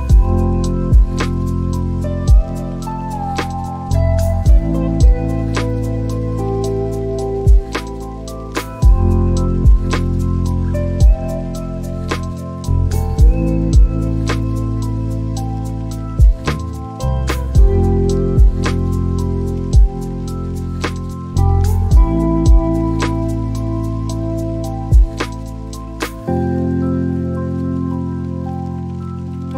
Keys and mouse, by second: 5.9 click, 7.4 click, 15.0 click, 17.3-19.5 drag, 22.2-23.7 drag, 27.9-29.5 drag.